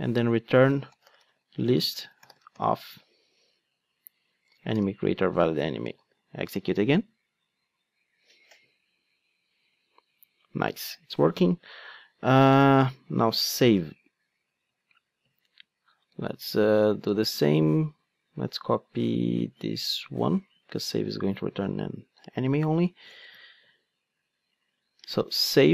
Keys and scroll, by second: 5.9 ctrl+d, 13.8 ctrl+Tab, 20.9 super+c, 23.3 super+v.